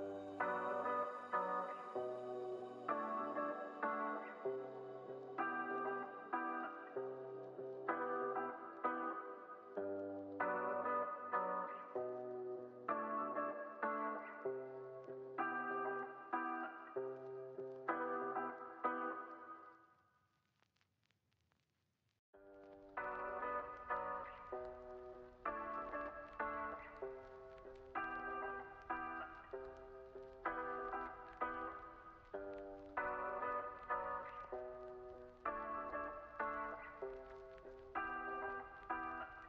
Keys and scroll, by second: 9.5 F9.